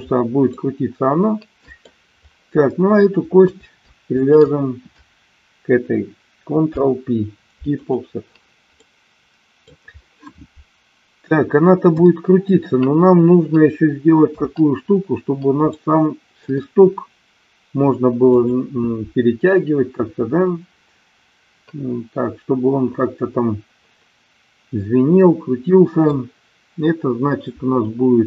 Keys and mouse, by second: 0.4-1.8 middle drag, 4.2 shift+click, 6.7 ctrl+p, 8.8-9.8 middle drag, 11.8 KP_1, 14.2 KP_3, 15.8 middle click.